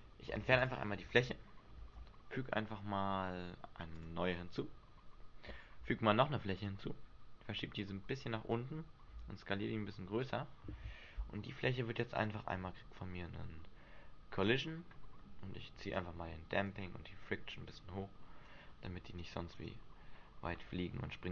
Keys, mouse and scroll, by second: 0.5 Delete, 1.9 shift+a, 5.9 shift+a, 7.9 click, 9.3 s, 10.4 click, 12.3 click, 14.6 click, 16.1 click, 19.7 right click.